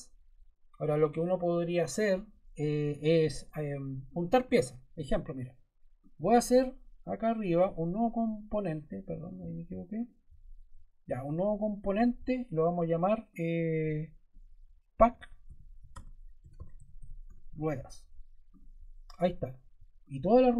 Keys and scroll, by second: 14.6-17.8 typing.